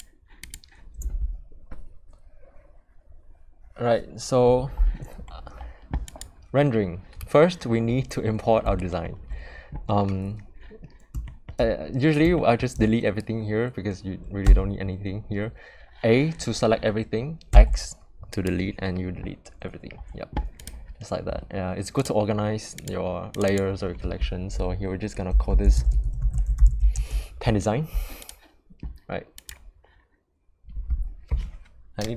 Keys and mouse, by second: 0.0 click, 6.1 click, 8.7 shift+middle drag, 11.2 shift+middle click, 12.3 shift+middle click, 14.4 a, 17.5 x, 23.3 click, 23.5-28.0 drag, 28.3 click, 29.4-32.1 drag.